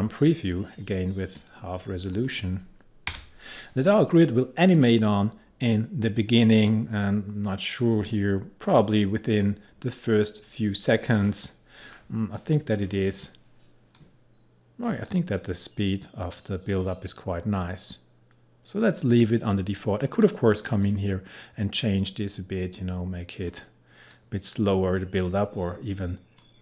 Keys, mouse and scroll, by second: 1.4 click, 12.4-26.6 drag.